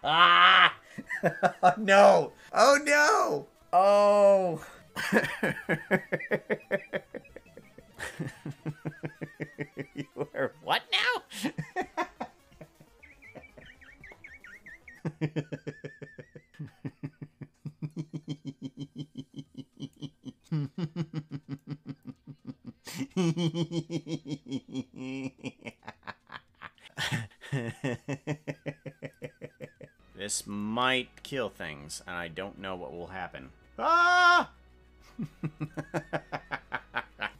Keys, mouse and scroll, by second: 18.1-20.1 drag, 20.5-21.8 drag, 25.9-26.9 drag.